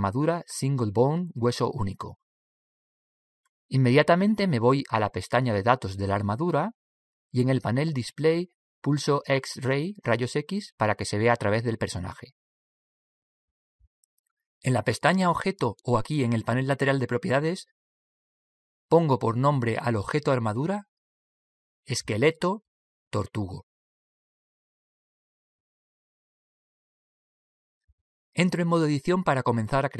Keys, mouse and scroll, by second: 0.1 shift+a, 12.7 click, 18.1 click, 20.2 click.